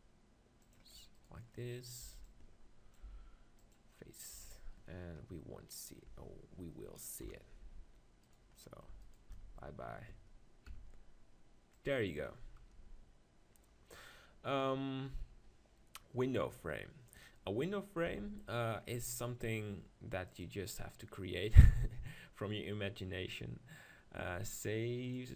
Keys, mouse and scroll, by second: 0.8-2.7 drag, 1.2-2.6 right drag, 1.5-2.9 middle drag, 2.1 b, 2.8 right click, 3.1 click, 3.1 x, 4.3 Tab, 5.3 KP_0, 6.1 Tab, 7.2 KP_7, 8.3-10.4 drag, 9.4 shift+x, 10.4 right click, 10.7 x, 12.7 KP_0, 16.5 KP_1, 17.5-19.4 middle drag, 18.1 Tab.